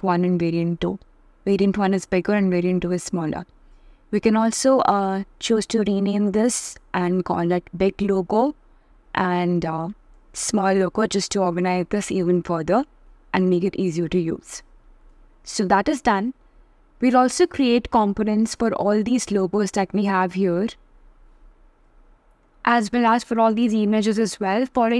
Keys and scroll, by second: 5.4 shift+b, 6.3 shift+l, 9.1 shift+s.